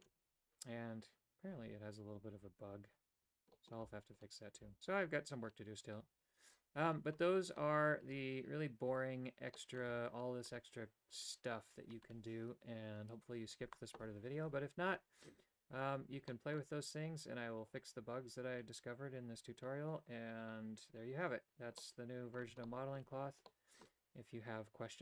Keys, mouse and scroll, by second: 3.6 middle click, 9.6 middle click, 16.4 middle click, 21.9 middle click, 22.7 shift+middle click, 23.5 middle click.